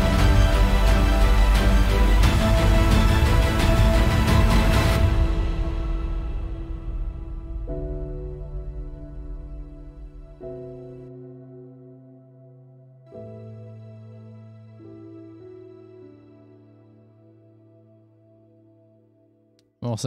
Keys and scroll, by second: 18.3 super+=.